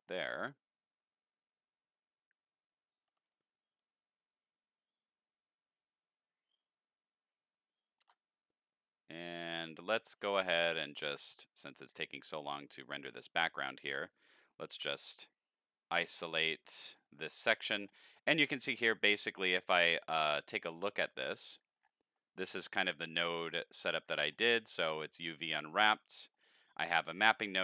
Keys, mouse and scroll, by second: 1.1-1.8 scroll up 6, 3.3-4.5 shift+middle drag, 5.5-8.0 shift+middle drag, 10.5 click, 11.7 shift+click, 13.1 shift+click, 16.5 KP_Divide, 19.1 click, 20.7 middle click, 21.4-22.0 scroll down 10, 22.1 middle click, 22.9 scroll down 2, 23.2-23.8 middle drag, 24.0-24.5 scroll up 9, 24.7 middle click, 25.3 click, 26.2 middle click, 27.0-27.4 drag.